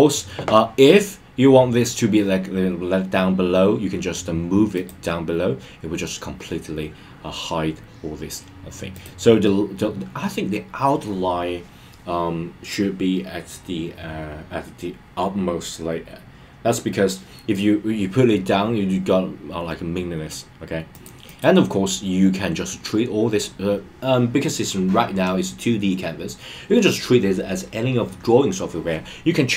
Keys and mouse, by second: 4.7 click, 8.9 click, 21.0 click, 21.2 click.